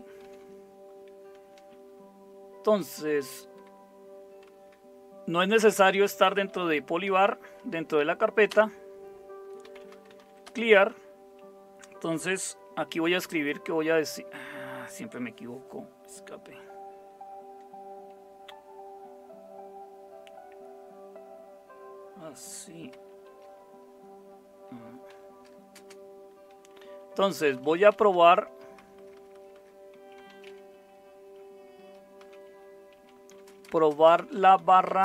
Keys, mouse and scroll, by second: 0.2 Left, 2.8 ctrl+x, 7.2 typing, 8.5 typing, 9.6 Return, 9.7-11.0 typing, 13.0 Return, 18.8 Escape, 25.1-30.4 typing, 31.8-35.0 typing.